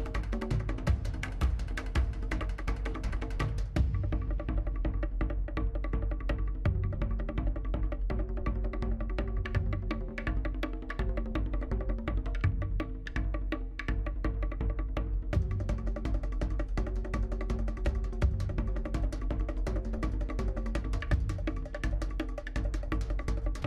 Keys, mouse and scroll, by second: 0.0 click, 0.7-1.2 scroll down 4, 0.8 middle click, 1.2 middle click, 1.6-2.5 scroll up 7, 1.7 shift+middle click, 2.3 shift+middle click, 2.5 shift+middle click, 3.6 shift+click, 3.9-4.4 scroll down 3, 4.0 middle click, 4.4 middle click, 4.7 scroll up 4, 4.9 shift+middle click, 5.7 click, 6.4 middle click, 7.7 middle click, 8.2 shift+click, 8.7 middle click, 9.3 scroll down 2, 9.5 middle click, 9.7 shift+click, 9.9 middle click, 10.7 middle click, 10.8 scroll up 2, 11.1 shift+click, 11.2 scroll down 4, 11.3 middle click, 11.9 scroll down 1, 12.0 middle click, 12.4-12.7 scroll up 3, 12.5 shift+middle click, 12.7 shift+middle click, 13.1 g, 14.9 middle click, 16.4 shift+z, 16.7 click, 17.0 middle click, 17.8 g, 18.2 scroll down 1, 18.3 middle click, 18.7 shift+z, 18.8 middle click, 19.3 g, 20.1 scroll down 1, 20.1 middle click, 20.3 scroll up 2, 20.4 scroll down 1, 20.5 middle click, 20.6-21.0 scroll up 1, 21.0 shift+z, 21.2 click, 21.4 middle click, 21.7 ctrl+click, 21.8 middle click, 22.0 shift+z, 22.1 middle click, 23.0 g, 23.3 middle click.